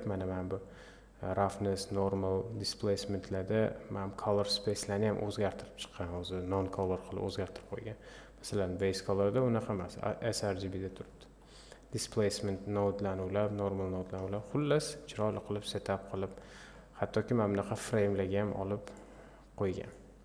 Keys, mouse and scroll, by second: 8.9 click, 12.9-16.3 drag, 17.4-19.7 drag.